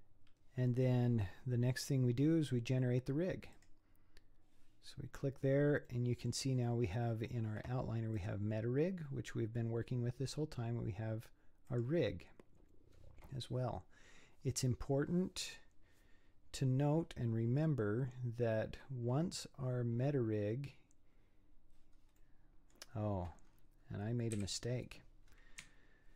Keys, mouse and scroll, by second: 3.6-5.1 drag, 5.1-5.9 scroll down 4, 5.9-8.2 middle drag, 8.2 click, 11.7 click, 22.2-23.4 middle drag, 23.4-24.4 scroll up 8, 24.4 KP_3, 25.3-26.1 scroll up 3.